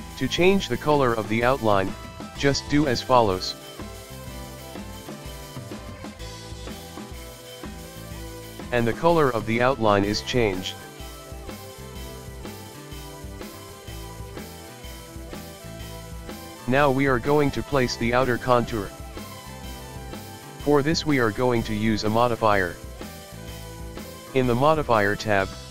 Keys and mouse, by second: 1.1 click, 7.8-9.9 shift+middle drag, 9.9-12.4 drag, 12.4 shift+middle click, 13.3-14.9 drag, 14.9-21.1 shift+middle drag, 22.7 click, 24.5-25.7 drag.